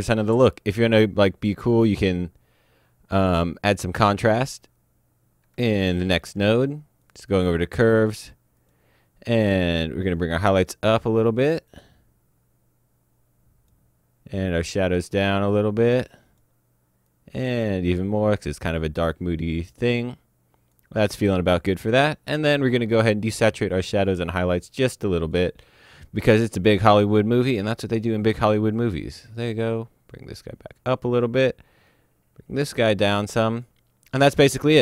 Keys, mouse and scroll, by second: 5.7 alt+Num_Lock, 5.9 alt+s, 7.0 click, 8.5 click, 10.1 click, 25.2 click, 27.0 click.